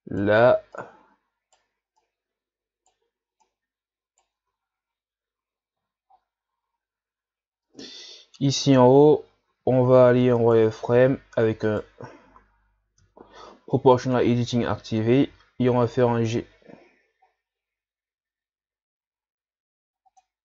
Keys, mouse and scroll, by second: 0.8 right click, 2.0 right click, 3.5 right click, 4.4 Tab, 4.7 scroll down 4, 6.1 shift+scroll up 2, 6.9-7.6 scroll up 2, 7.7 Tab, 9.5 z, 10.4 right click, 10.9 c, 13.0 o, 15.3 g.